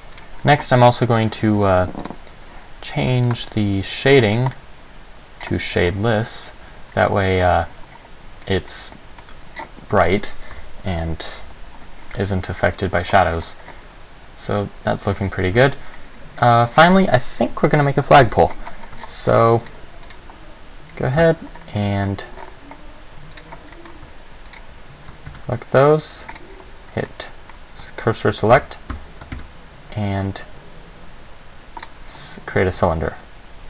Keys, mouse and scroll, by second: 0.3 right click, 2.2 click, 3.5 click, 5.6 click, 8.9 middle click, 9.7-10.7 scroll down 4, 10.7 KP_0, 15.7 Escape, 15.7-16.2 scroll down 2, 16.2 middle click, 16.9 right click, 18.4 KP_7, 19.2 shift+scroll down 1, 19.9 ctrl+scroll down 1, 20.3 right click, 21.4 Tab, 21.8-22.2 scroll up 2, 22.0 middle click, 22.6-23.4 scroll up 3, 23.5 right click, 24.0 middle click, 24.7 shift+right click, 25.6 shift+s, 27.3 middle click, 28.7 a, 29.1 Tab, 29.5 shift+a, 32.9 s.